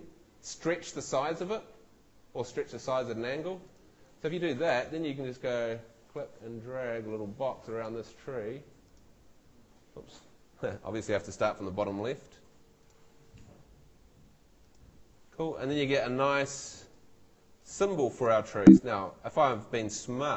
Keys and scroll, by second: 11.3 super+z, 18.5 Escape.